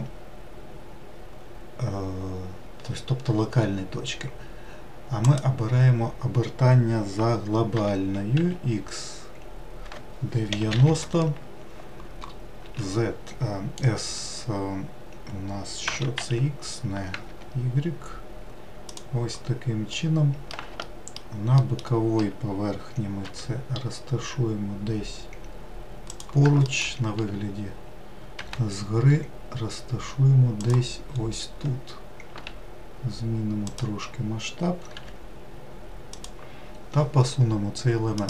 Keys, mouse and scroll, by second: 8.0 r, 12.8 s, 20.1 middle click, 21.8 alt+middle click, 23.5 g, 26.9 alt+middle click, 28.6 g, 31.3-31.8 scroll up 2, 32.6 s, 35.2 g.